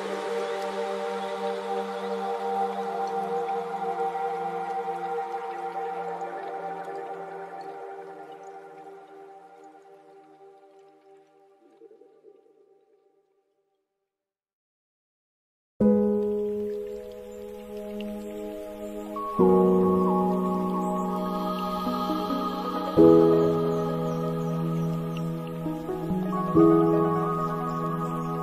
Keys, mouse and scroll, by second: 3.4-3.7 middle drag, 3.7-4.2 scroll down 3, 4.2-5.8 middle drag, 5.8 space, 6.7-12.0 middle drag, 12.1-13.1 middle drag, 13.1 click, 14.0-16.1 middle drag, 16.1-18.8 drag, 18.8-20.9 middle drag, 20.9 space, 21.3 space, 23.8-24.3 scroll down 2, 24.3-25.6 middle drag, 25.6-26.1 scroll down 8, 26.3-27.9 middle drag, 27.9-28.4 drag.